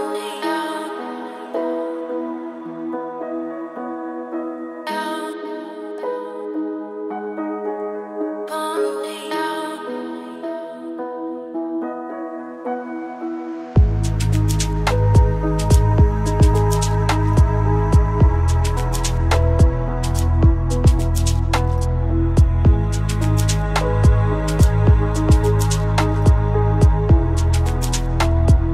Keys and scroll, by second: 1.5 ctrl+space, 5.7 ctrl+g, 22.3 ctrl+space.